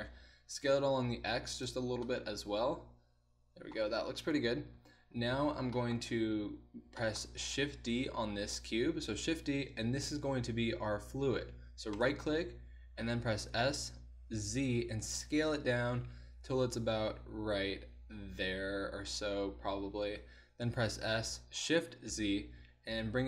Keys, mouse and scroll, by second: 0.3 s, 4.4 KP_1, 6.3 z, 9.1 shift+d, 13.6 s, 20.6 s.